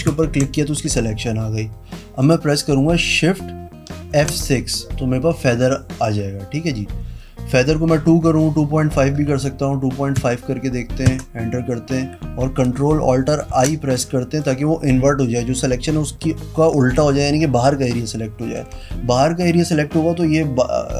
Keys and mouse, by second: 0.3 ctrl+click, 4.3 shift+F6, 9.5 KP_Decimal, 10.4 KP_5, 11.3 KP_Enter, 13.7 ctrl+shift+i.